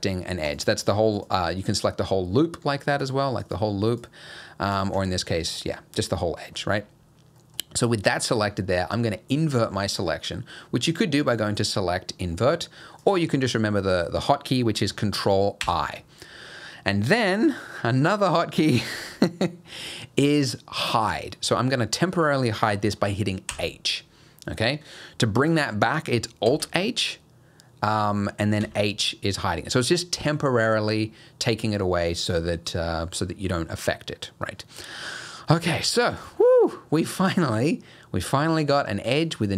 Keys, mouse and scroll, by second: 0.5 alt+click, 1.2 alt+click, 1.9 middle click, 2.0-2.6 scroll down 2, 2.6-3.0 scroll down 1, 3.0 alt+click, 3.4 alt+click, 4.1 alt+click, 4.7 alt+click, 5.3 middle click, 6.7-7.3 scroll up 1, 7.4 middle click, 10.9 click, 15.6 ctrl+i, 23.5 h, 26.5 alt+h, 28.6 h, 34.9 middle click, 35.8-36.2 scroll down 1, 36.2 click, 36.8 middle click, 37.4-37.8 scroll down 1, 37.8-38.3 scroll up 1.